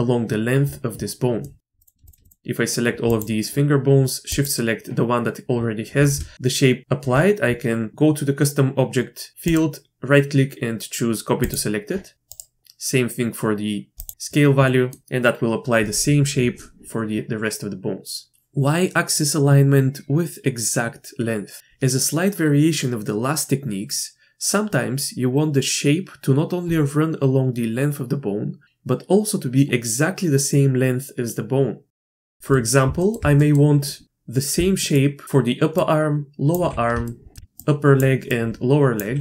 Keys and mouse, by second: 1.4 click, 1.8 click, 2.2-3.7 shift+drag, 9.4-11.5 drag, 12.3-14.3 drag, 14.7 click, 32.1 middle click, 32.2 shift+middle click, 32.5 middle click, 33.0 shift+middle click, 33.4 middle click, 34.5-35.7 d, 34.9 click, 36.5-36.9 drag, 36.5 d, 36.6-39.0 d, 37.0-37.3 shift+middle drag, 39.0-39.2 drag.